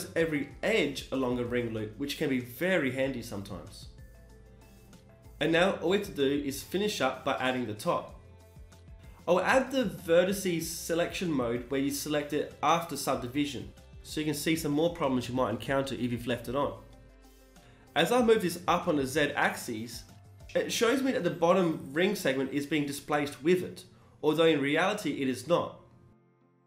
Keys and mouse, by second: 0.7-2.6 middle drag, 2.6-4.6 drag, 5.7-7.5 drag, 8.3-10.1 right drag, 8.7 s, 10.1 KP_1, 13.5 e, 13.9 g, 21.8-25.2 drag, 23.4 g, 25.2 a, 25.4 a, 25.8 w.